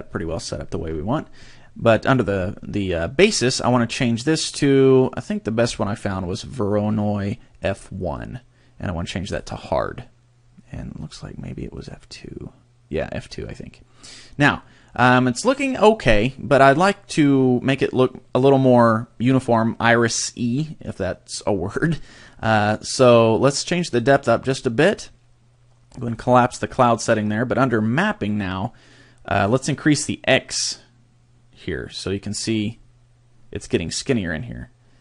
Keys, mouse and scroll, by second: 3.7 click, 9.3 click, 11.0 click, 23.9 click, 24.5 click, 26.1 click, 30.5 click.